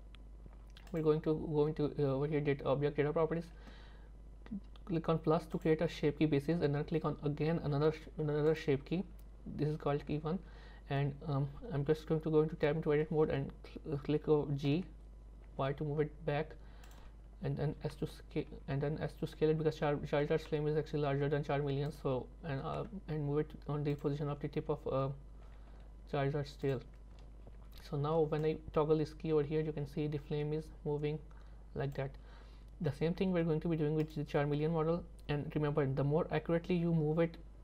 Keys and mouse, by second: 5.6 click, 8.5 click, 12.6 Tab, 14.7 g, 18.0 s, 22.6 g, 27.2 Tab, 28.5-32.0 drag, 34.0 click.